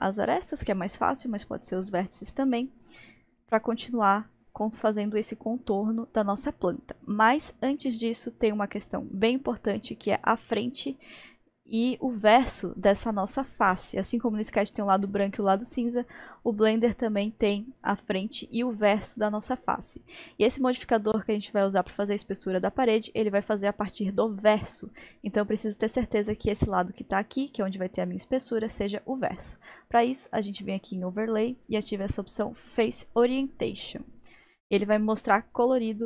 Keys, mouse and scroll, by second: 0.5-1.7 middle drag, 1.7-2.4 scroll up 2, 2.4-3.3 scroll up 1, 3.3 click, 7.9-13.2 middle drag, 15.1-18.1 middle drag, 30.9 click, 33.8 click, 34.3-36.0 middle drag.